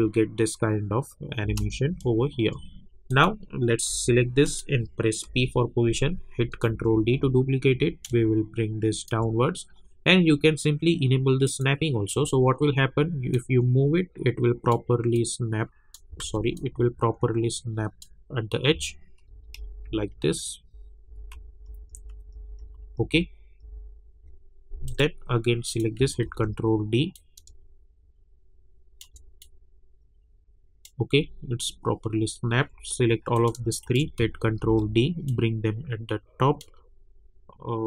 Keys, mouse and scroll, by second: 1.4 space, 3.1 click, 3.9 j, 4.4 click, 5.2 p, 6.7 ctrl+d, 7.3 alt+scroll up 1, 8.3-11.3 shift+drag, 13.6 click, 16.2 ctrl+z, 16.5-19.3 drag, 19.3 Down, 21.3 Up, 24.8 click, 26.2 ctrl+d, 27.1-29.4 drag, 29.4-31.3 drag, 31.3-31.9 alt+scroll down 1, 32.5 alt+scroll up 1, 33.3 click, 33.8 shift+click, 34.6 ctrl+d, 35.3-37.8 drag.